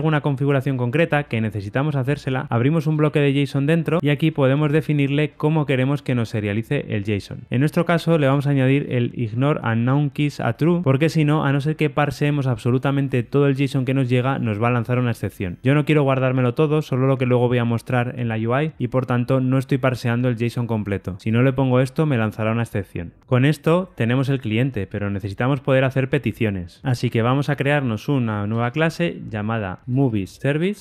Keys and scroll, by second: 4.0 alt+Return, 8.1 Tab, 27.4 super+n.